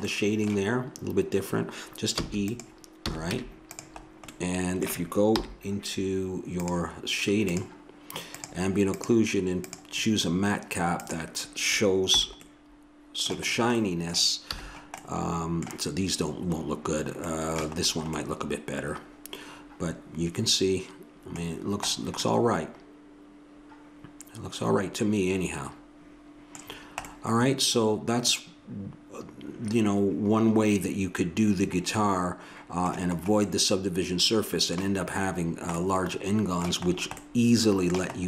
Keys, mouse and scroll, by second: 2.1 e, 3.0 a, 3.3 Tab, 5.3 n, 12.1 n, 14.5 a, 19.1 middle click, 20.2 middle click, 21.2 middle click, 23.9 middle click, 26.7-29.0 middle drag, 33.5-35.4 middle drag, 35.5-38.2 middle drag.